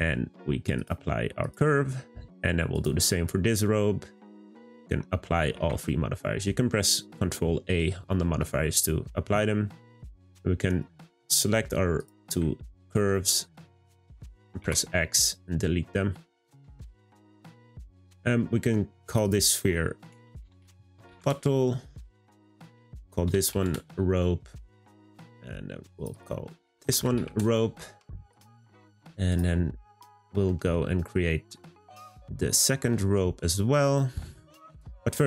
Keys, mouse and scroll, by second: 4.8 a, 5.2 a, 8.2-10.0 middle drag, 10.0 click, 11.9 shift+click, 13.2-14.6 middle drag, 14.6 x, 17.7 click, 19.0 click, 19.2-20.6 drag, 20.6 t, 22.2 click, 22.5-24.9 drag, 25.9 click, 26.1-28.4 drag, 29.3 drag, 30.4-32.0 middle drag, 32.0 click, 32.5-34.6 middle drag, 34.6 click, 35.0-35.2 middle drag.